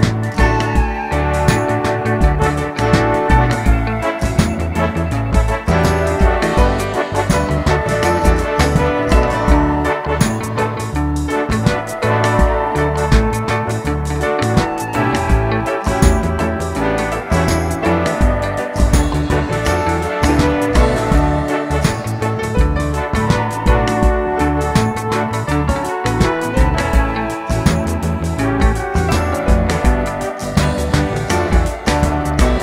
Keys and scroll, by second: 12.0-12.8 typing, 25.8 typing, 28.0 typing.